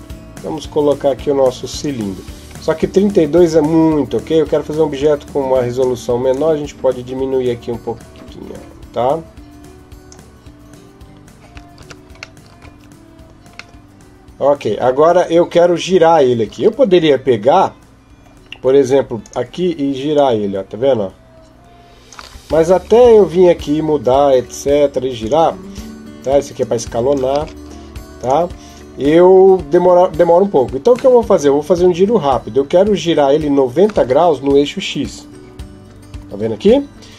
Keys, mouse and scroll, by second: 4.8 click, 6.1 click, 11.6 Tab, 12.2 middle click, 12.5 Tab, 13.6 middle click, 19.0 click, 19.9 click, 22.5 ctrl+z, 25.0 click, 26.4 click, 27.2 ctrl+z, 28.0 click, 30.9 middle click.